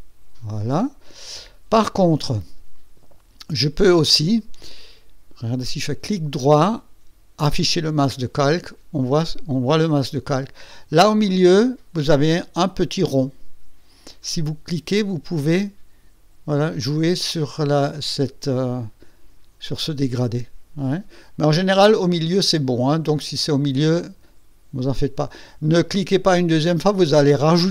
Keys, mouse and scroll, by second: 5.8 right click, 7.5 click, 14.1-24.6 drag.